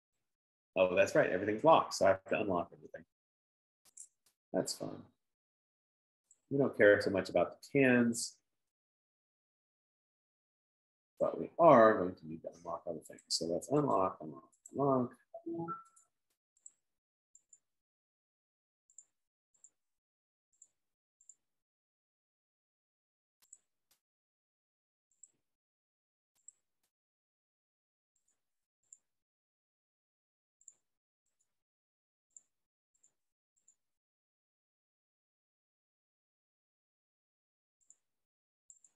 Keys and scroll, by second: 22.4 F15.